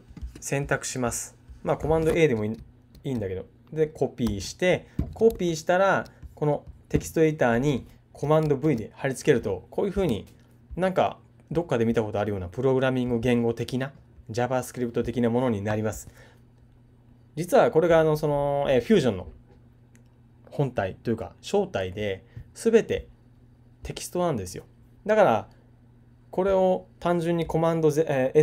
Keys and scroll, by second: 4.2 super+c, 5.3 super+Tab, 8.6 super+v.